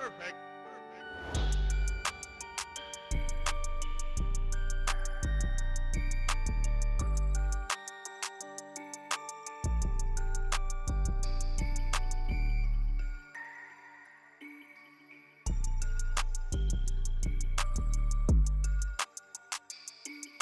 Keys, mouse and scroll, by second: 1.1 ctrl+a, 2.3 s, 4.9 ctrl+a, 5.5 click, 5.8 middle drag, 6.6 shift+middle click, 7.1 shift+drag, 7.7 shift+a, 9.5 shift+click, 10.1 ctrl+2, 10.4 right click, 11.3 Tab, 11.7 3, 12.2 s, 14.5 Tab, 15.2 KP_7, 16.5 alt+d, 18.9 alt+d.